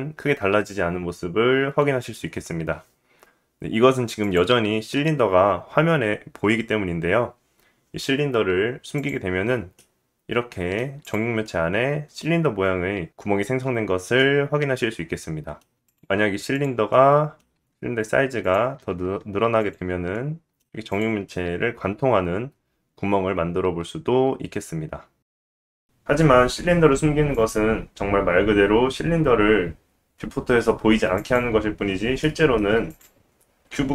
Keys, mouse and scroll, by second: 4.2 click, 8.9 click, 9.7-11.0 middle drag, 11.0 click, 11.1-22.1 middle drag, 17.2 s, 18.8 g, 22.1 click, 22.2-23.7 middle drag, 23.7 click, 23.8-27.3 middle drag, 27.3 click, 27.5-31.2 middle drag, 31.2 click, 31.3-32.9 middle drag, 32.9 click, 33.0-33.9 middle drag, 33.7 g.